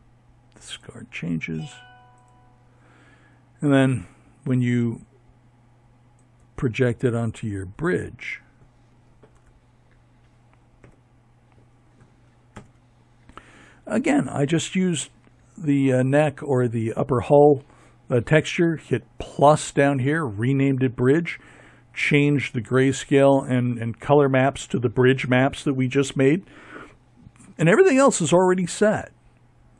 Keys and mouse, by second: 4.4-6.8 right drag, 7.1 z, 8.6 Tab, 10.3 ctrl+Left.